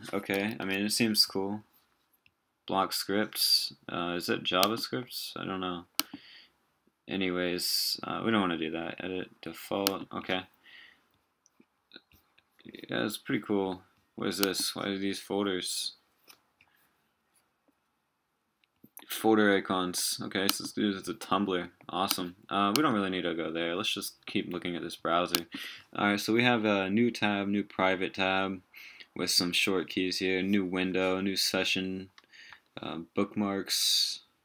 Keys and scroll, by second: 0.6 super+w.